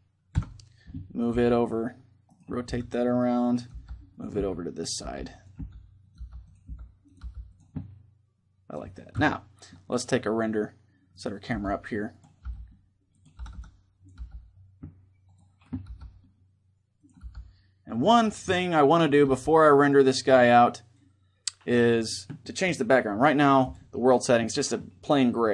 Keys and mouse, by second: 0.1 KP_7, 1.1 r, 2.1-3.4 right drag, 2.4-6.9 typing, 4.1-7.5 drag, 7.5-8.9 middle drag, 8.9 KP_0, 10.9-11.9 right drag, 11.3 g, 12.1 g, 12.7-16.7 drag, 13.1 r, 13.9 g, 15.6 g, 16.9-19.5 drag, 16.9 g, 18.3-20.1 middle drag, 19.0 g, 19.6-21.5 drag, 23.3-25.4 drag.